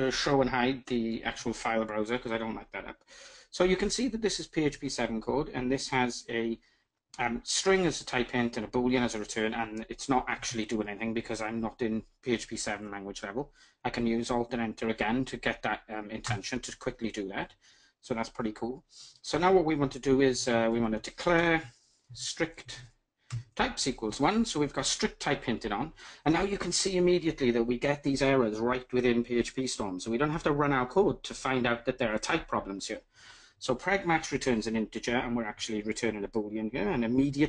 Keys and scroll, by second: 10.0 alt+Return, 20.9 Return.